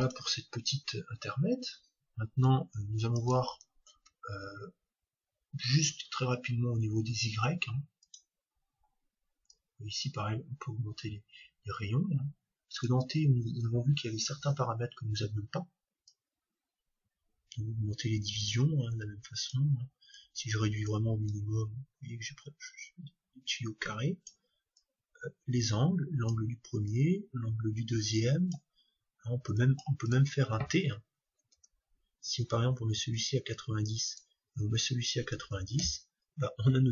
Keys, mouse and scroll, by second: 2.4-5.1 drag, 3.9 shift+a, 9.5-11.4 drag, 16.0-18.0 drag, 20.1-23.1 drag, 24.7-26.7 drag, 26.9-28.7 drag, 29.6-31.9 drag, 34.0-35.9 drag.